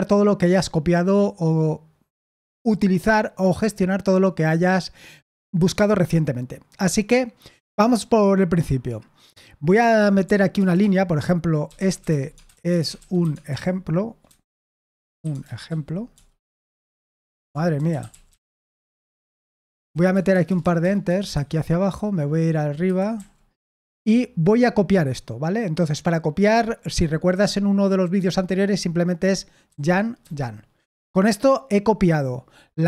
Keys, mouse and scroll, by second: 10.2 typing, 10.5 Return, 10.7 Return, 11.3-19.7 typing, 14.3 ctrl+w, 14.5 ctrl+w, 20.0 Return, 20.2 Return, 20.4 Return, 22.5-24.0 typing, 29.6-30.1 typing.